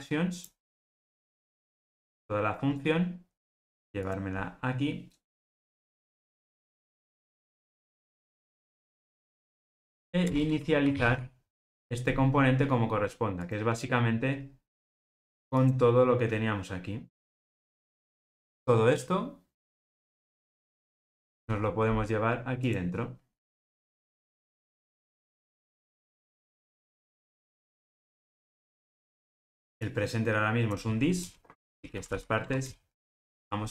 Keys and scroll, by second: 0.6 super+x, 6.1 super+v, 20.9 super+x, 24.0 super+v, 31.8 alt+shift+Right.